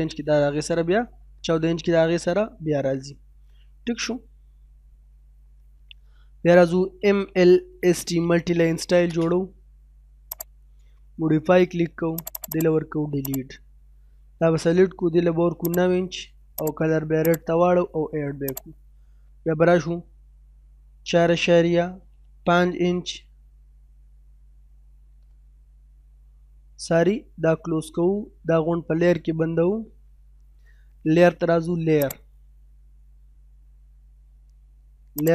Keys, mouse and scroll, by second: 2.6-3.0 scroll down 1, 2.6 typing, 3.0 middle click, 8.4 space, 14.7 9, 15.7-24.0 drag, 20.9 4, 23.8-24.5 typing, 27.7 middle click, 28.9 scroll down 1, 29.2 middle click, 32.0 click, 35.1 click.